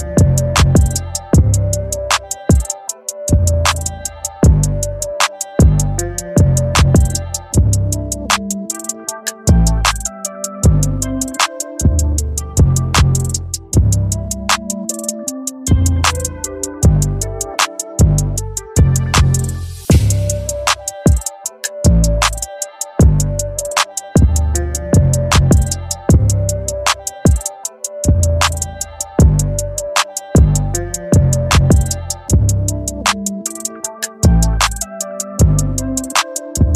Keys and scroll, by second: 0.0 v, 5.9 b.